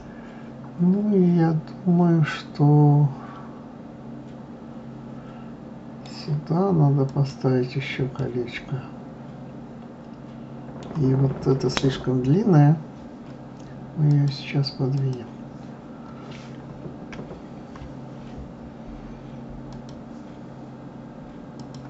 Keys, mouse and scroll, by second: 7.1 click, 8.2-11.2 middle drag, 14.1-17.1 drag, 19.7 click, 21.6 click.